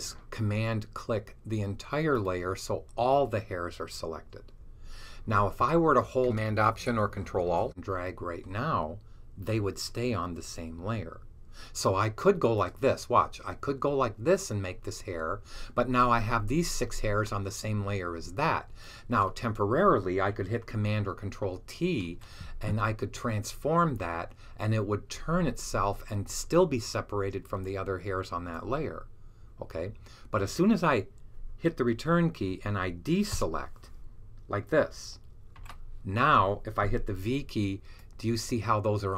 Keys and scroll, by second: 21.9 super+t, 35.4 d, 37.1 v.